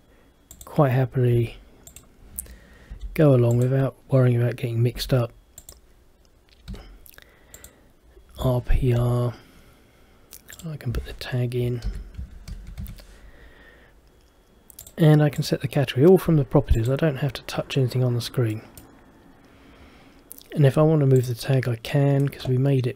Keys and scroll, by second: 12.0 shift+t.